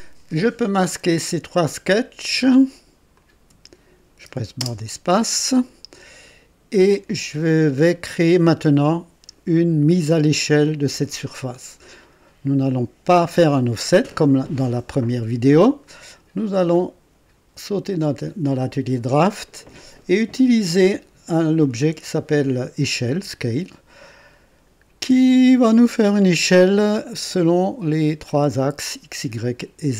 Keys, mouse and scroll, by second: 1.2 click, 3.1 shift+click, 4.5 space, 18.1 click.